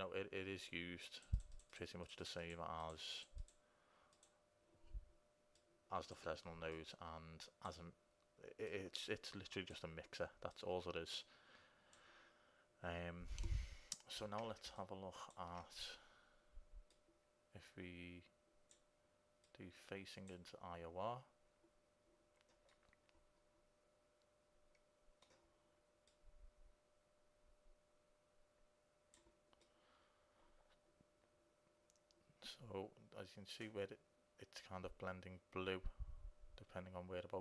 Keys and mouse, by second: 12.1 click, 14.9-16.9 drag, 17.0-18.9 drag, 19.7-21.5 drag, 22.8-25.0 middle drag, 26.3-29.4 drag, 29.8 middle click, 31.3 middle click.